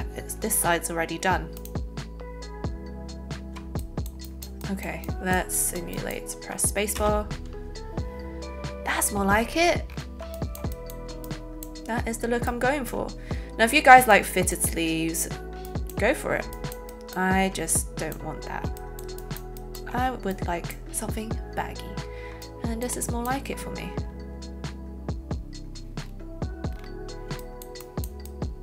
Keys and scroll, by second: 6.9 alt+space.